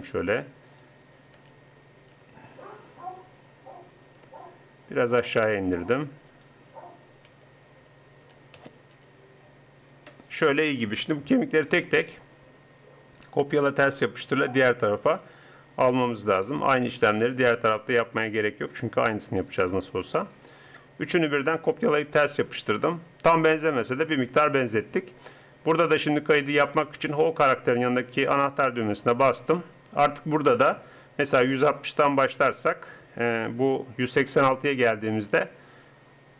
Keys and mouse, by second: 0.7 click, 1.4 r, 6.3-7.3 drag, 7.3 t, 8.2 t, 8.6 r, 11.7 right click.